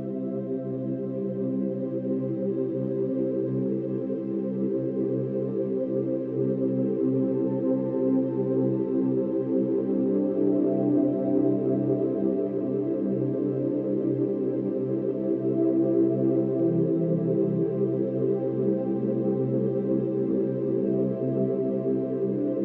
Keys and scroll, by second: 4.3-4.8 space, 9.5 Delete, 11.8 Delete, 17.5 ctrl+z, 18.8 ctrl+z.